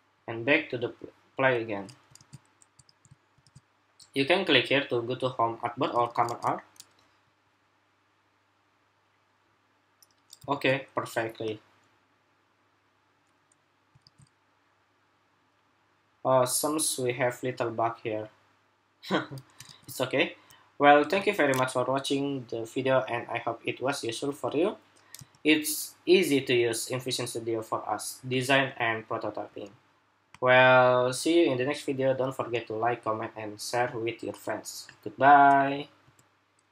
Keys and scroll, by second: 1.9 super+r, 2.6 super+r, 3.2 super+r, 5.8 super+r, 6.0 super+r, 10.3 super+r, 13.8 super+r, 19.4 super+r, 25.0 super+r, 36.5 shift+super+2.